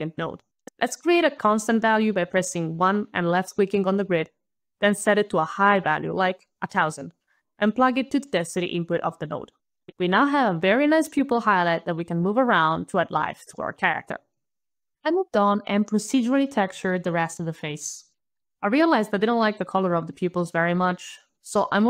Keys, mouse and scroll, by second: 0.2 alt+q, 0.5 alt+1, 0.5 alt+right click, 1.2 alt+click, 2.7 alt+click, 5.0 alt+click, 6.1 alt+KP_1, 6.3 alt+KP_0, 6.4 alt+KP_0, 6.6 alt+KP_0, 6.8 alt+KP_Enter, 7.7 alt+click, 13.2 alt+click, 13.3 alt+click, 13.9 alt+KP_Decimal, 14.1 alt+KP_6, 14.4 alt+KP_Enter, 14.9 alt+click, 15.0 alt+click, 16.5 alt+right click, 17.5 alt+middle click, 17.6 alt+middle click, 18.2 alt+right click, 19.5 alt+middle click.